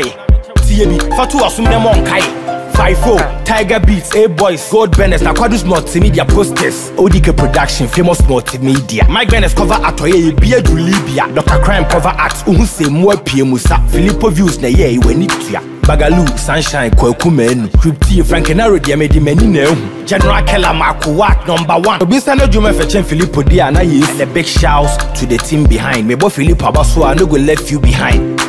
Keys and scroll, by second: 9.2 Left, 10.8 Down.